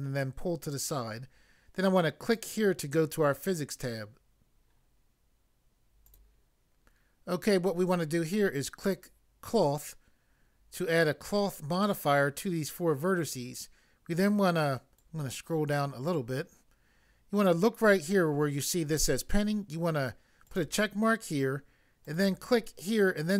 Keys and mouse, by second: 2.2 click, 6.0 click, 6.1 click, 9.4 click, 15.0 click, 20.4 click, 22.0 click.